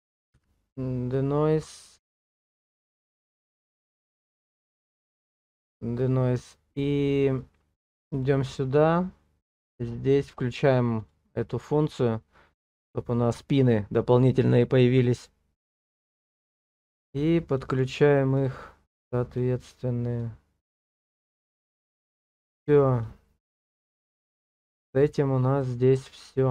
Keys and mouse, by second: 5.5 click, 11.0 click, 17.6 click, 19.3 click, 21.0-22.0 middle drag, 23.0-25.6 drag.